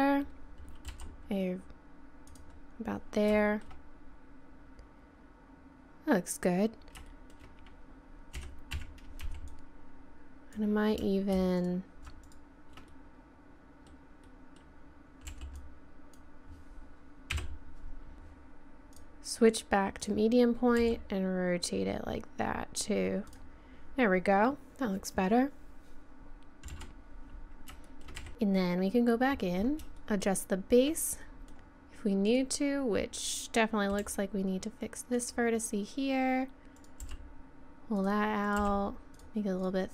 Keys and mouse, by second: 0.9 r, 3.4-5.3 middle drag, 6.7 middle click, 8.4 a, 8.7 z, 9.2 b, 11.6 right click, 13.7 middle click, 15.3 b, 17.3 KP_7, 18.1 r, 20.7 click, 20.8 r, 26.7 z, 27.0 middle click, 28.2 a, 30.1 middle click, 30.4 middle click, 31.3 middle click, 32.1 right click, 34.0 g, 36.8 click, 37.0 g, 38.6 g, 39.2 click.